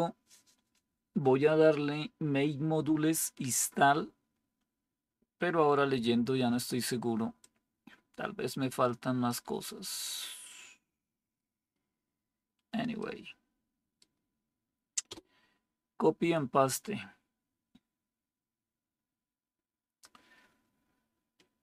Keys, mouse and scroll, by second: 15.0 Return.